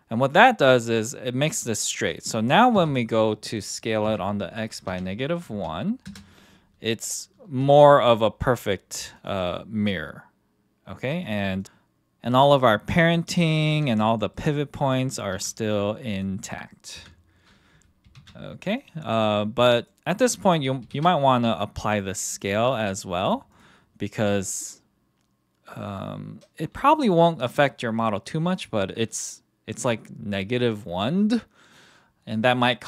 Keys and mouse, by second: 2.7 s, 4.0 x, 4.8 KP_Subtract, 5.5 KP_1, 6.0 KP_Enter, 7.6 g, 9.2 click, 11.3 click, 11.6 KP_1, 13.1-13.4 middle drag, 13.7 r, 14.1 drag, 14.3-14.7 middle drag, 14.9 middle drag, 15.3 r, 16.9 KP_1, 18.2 ctrl+z, 18.9-19.9 drag, 20.9 ctrl+a, 22.7 click, 23.5 click.